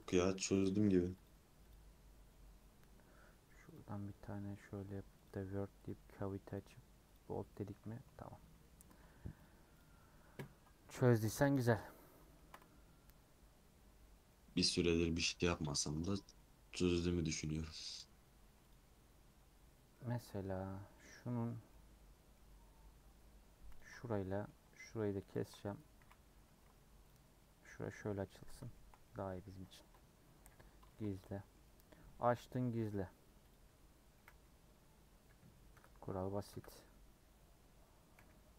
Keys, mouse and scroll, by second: 0.0-3.7 drag, 7.5 middle click, 8.0 scroll up 2, 8.4 scroll down 1, 8.6 middle click, 9.0 Tab, 9.4 click, 9.7 click, 11.1 middle click, 11.6 scroll up 3, 12.0 scroll down 2, 12.3 shift+middle click, 12.6 Tab, 14.2 middle click, 15.0 scroll up 1, 15.4-17.9 middle drag, 17.9 click, 18.4 2, 18.7 click, 19.6 scroll down 1, 19.9-22.5 middle drag, 22.5 scroll up 1, 23.7 click, 24.2-25.4 shift+middle drag, 25.4 shift+click, 25.9 a, 27.0 u, 28.2-29.8 middle drag, 29.8 Tab, 30.4 h, 30.9-32.9 shift+middle drag, 32.9 click, 33.5 click, 34.1 KP_Decimal, 35.2 KP_Decimal, 35.7 KP_0, 36.5 KP_0, 38.1 /.